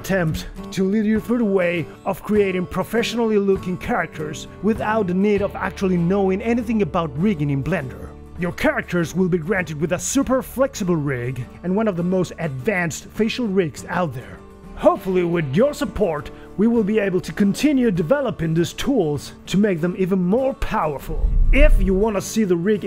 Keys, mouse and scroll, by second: 0.4-10.2 typing, 11.4 r, 12.7 r, 14.1-17.8 typing, 19.0 r, 20.3 r, 20.7 r, 21.5 g.